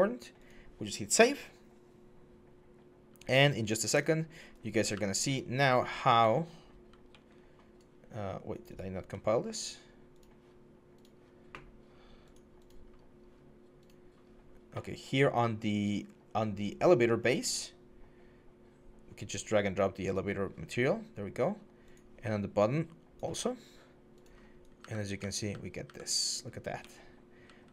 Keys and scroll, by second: 4.7-6.9 typing, 24.6-27.7 typing.